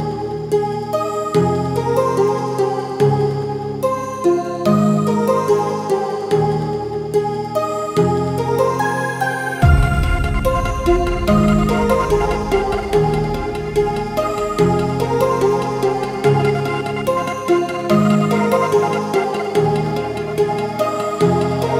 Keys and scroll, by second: 15.6 ctrl+z.